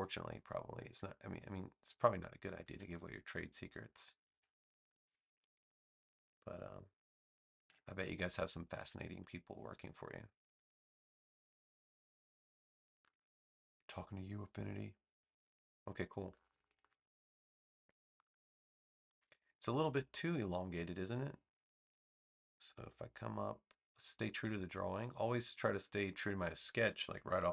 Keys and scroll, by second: 2.6 a.